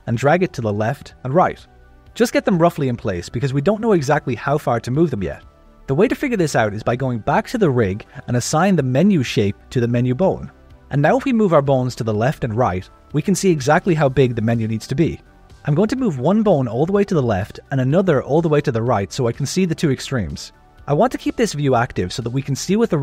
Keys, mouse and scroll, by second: 0.7 alt+a, 0.8 click, 1.3 g, 3.2 Tab, 7.6 KP_1, 8.3 click, 9.0 ctrl+middle click, 9.6 shift+middle click, 10.3 click, 10.9 g, 16.2 click, 16.6 g, 19.5-21.4 ctrl+middle drag, 22.7 click.